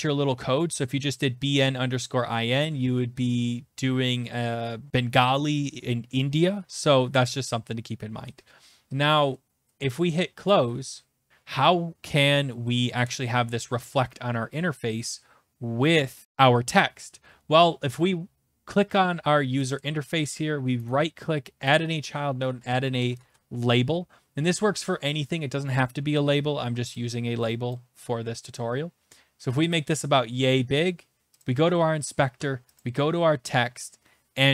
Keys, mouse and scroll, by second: 10.5 click, 19.7 click, 20.9 right click, 21.7 click, 22.4-23.8 typing, 24.3 Return, 27.7 click, 29.7 click, 30.0 click, 31.4 click, 32.8 click.